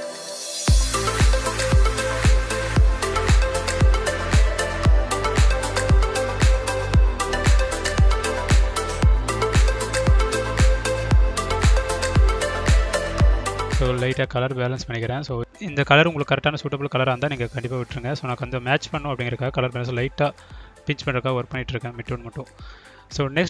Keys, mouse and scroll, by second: 1.1 click, 4.9 click, 5.6 drag, 6.9 click, 8.5 click, 10.0-12.6 drag, 13.3-17.0 drag, 17.5-21.2 drag.